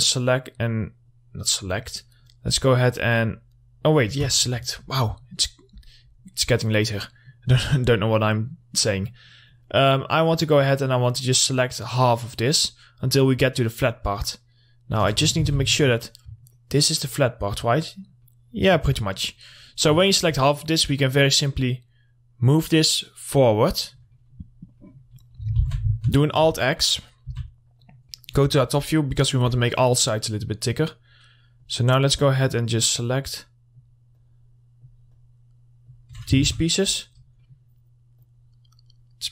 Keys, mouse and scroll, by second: 4.7 scroll down 1, 5.2 middle click, 5.9-6.5 scroll up 1, 6.5 middle click, 6.9 scroll up 1, 7.2 middle click, 7.9-15.5 ctrl+drag, 15.5 alt+x, 15.9-19.3 alt+middle drag, 19.3 scroll down 1, 19.7 middle click, 19.9 scroll down 1, 20.2 alt+middle click, 21.6-24.3 drag, 24.3 middle click, 24.7 scroll up 1, 24.9 middle click, 25.2-25.6 scroll down 1, 25.8 alt+x, 26.2 alt+click, 26.8 middle click, 27.9 click, 28.3 middle click, 28.6-29.2 scroll up 1, 29.2 middle click, 29.4 scroll up 1, 29.8-36.6 ctrl+drag, 36.6 alt+x, 36.8 middle click, 37.0-37.6 scroll down 1, 37.6 middle click, 38.4-39.3 drag.